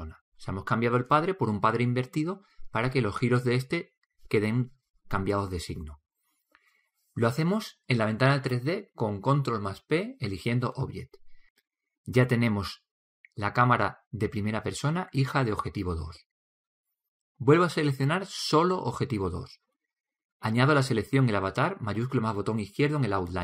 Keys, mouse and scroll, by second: 9.9 ctrl+p, 20.8-22.7 drag.